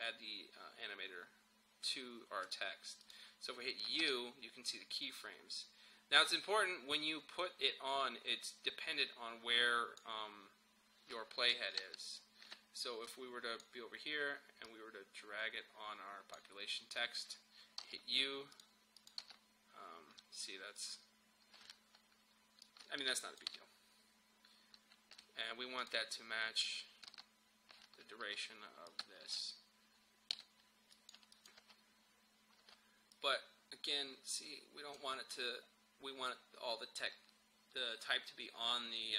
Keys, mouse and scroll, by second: 2.5 click, 4.0 u, 9.0-11.8 drag, 11.8 ctrl+z, 13.1-17.8 drag, 17.8 u, 18.6 click, 19.2 u, 20.8-25.8 drag, 27.1 u, 28.9-30.9 drag, 31.6 space, 33.2-37.4 drag.